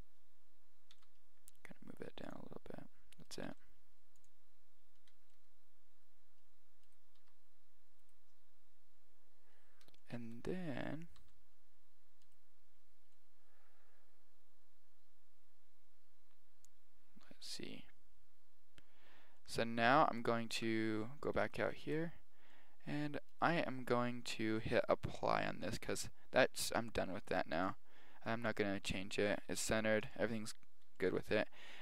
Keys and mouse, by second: 0.9 g, 3.2 right click, 3.4 g, 5.3 right click, 5.3-6.9 middle drag, 6.9 right click, 7.3 r, 9.7-12.4 middle drag, 11.2 g, 13.1-15.0 middle drag, 19.4-21.5 middle drag, 20.6 Tab, 23.3 right click, 25.7-27.5 middle drag, 27.5 click, 28.2-28.6 middle drag, 28.6 click, 29.5 KP_1, 30.0 KP_1, 31.0 middle drag.